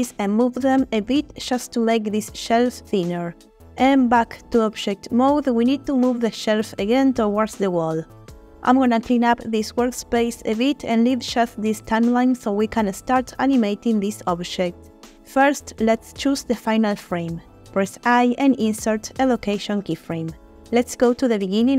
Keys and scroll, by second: 0.0 g, 0.3 y, 4.7 Tab, 7.7 g, 7.9 y, 18.8 i.